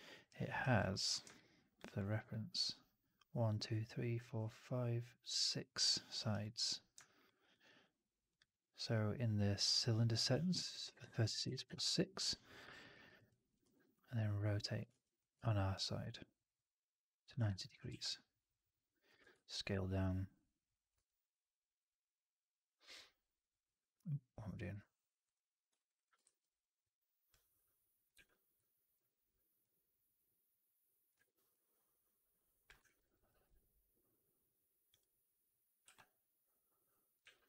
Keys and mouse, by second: 7.3 alt+middle click, 12.7 alt+middle click, 12.9 alt+middle click, 13.2 alt+click, 14.8 ctrl+z, 15.3-17.2 ctrl+drag, 17.4 click, 17.8 r, 19.1 w, 20.8 f, 25.1 click, 25.7 alt+right click, 25.8 alt+right click, 26.1 shift+x, 28.0 r, 31.0 w, 32.7 alt+middle click, 32.9 alt+right click, 33.2 alt+click, 34.8 click, 37.1 w.